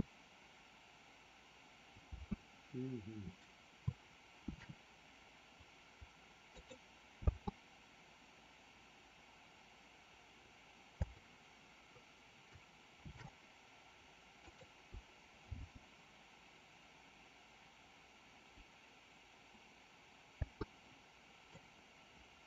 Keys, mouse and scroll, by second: 2.1 space, 4.5 shift+d, 7.2 space, 11.0 space, 13.1 shift+d, 15.3 space, 20.3 space, 21.6 click.